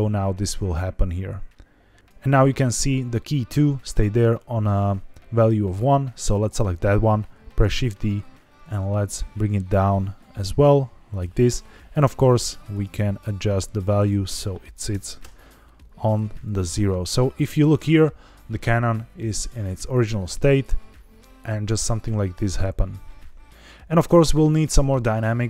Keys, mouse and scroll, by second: 6.1 click, 7.5 shift+d, 11.0 click, 12.6 click, 13.9-15.1 drag, 16.4-17.7 drag, 19.6-24.6 drag.